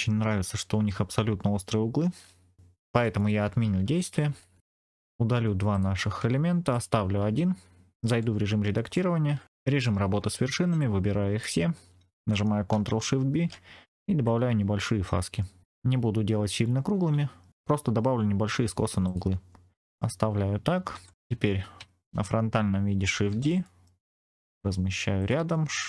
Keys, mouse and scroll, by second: 3.6 ctrl+z, 3.8 ctrl+z, 4.1 ctrl+z, 4.3 ctrl+z, 4.6 ctrl+z, 4.6 click, 5.2 Delete, 5.6 click, 6.1 Delete, 6.6 click, 8.0 Tab, 8.8 middle click, 9.4 click, 9.6 1, 10.7 click, 13.2 ctrl+shift+b, 15.0-15.6 scroll up 1, 17.0-17.5 scroll down 1, 19.0 click, 19.8 middle click, 20.8 Tab, 21.7 KP_3, 23.2 shift+d, 23.5 middle click, 25.1 click.